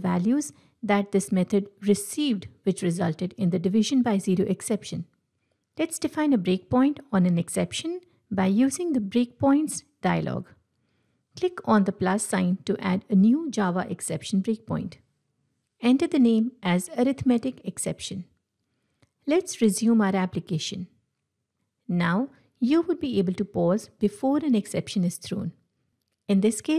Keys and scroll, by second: 7.0 ctrl+shift+F8, 22.0 ctrl+F5, 22.6 F8.